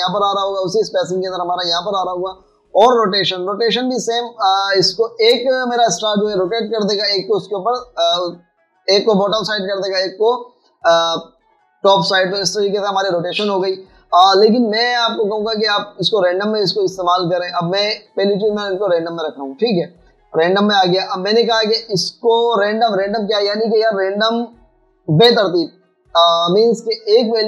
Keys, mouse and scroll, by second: 19.6 double click, 20.7 double click.